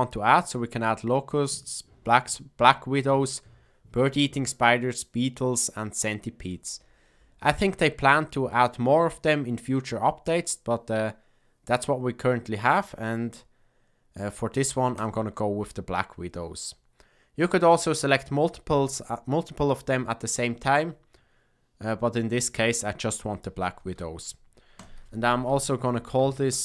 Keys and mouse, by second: 14.9 click, 24.8-26.6 drag.